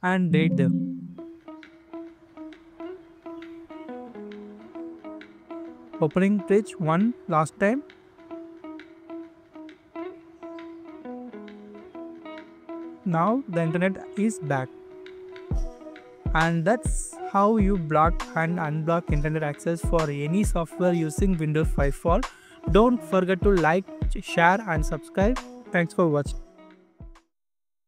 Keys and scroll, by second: 12.8 scroll down 1, 17.3 scroll up 1, 20.9-21.3 scroll down 1.